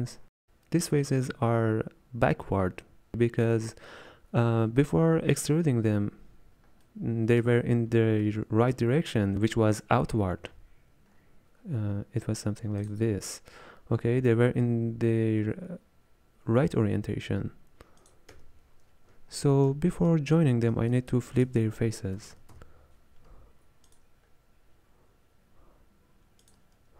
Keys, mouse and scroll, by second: 0.1-6.4 drag, 6.4-6.9 scroll down 3, 6.9-12.9 middle drag, 12.9 click, 13.0 m, 18.1 click, 18.4-20.1 middle drag, 18.4 m, 20.1-24.0 drag, 24.0 space.